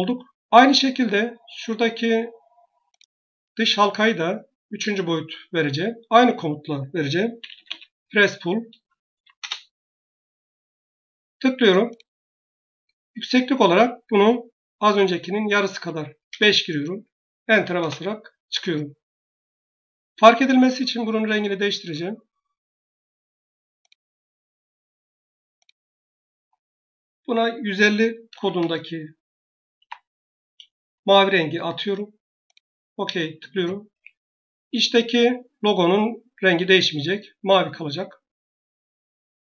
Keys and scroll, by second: 6.0 Escape, 7.0-9.0 typing, 9.2 Return, 15.6 5, 16.2 Return, 17.6 Return, 27.9-28.9 typing, 29.6 Tab, 36.4 Escape.